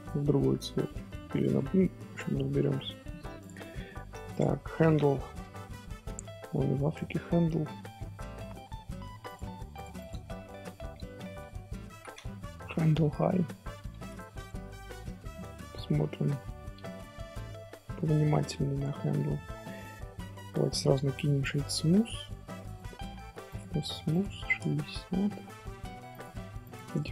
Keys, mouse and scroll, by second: 1.1-3.4 middle drag, 3.4 click, 3.7 scroll down 2, 3.8 shift+middle click, 4.3 click, 4.5 scroll down 2, 4.5 scroll up 1, 4.6 scroll down 1, 4.8-6.5 shift+middle drag, 6.5-6.9 scroll down 1, 6.9-9.2 shift+middle drag, 9.2 click, 9.7 click, 9.9-13.1 drag, 15.8 shift+h, 16.1-16.7 middle drag, 16.7 scroll up 1, 16.8-18.6 shift+middle drag, 18.6 Tab, 18.9-20.0 middle drag, 20.0 scroll up 1, 20.0 scroll down 1, 20.2 Tab, 22.7 click, 23.4 click, 24.1-26.2 drag.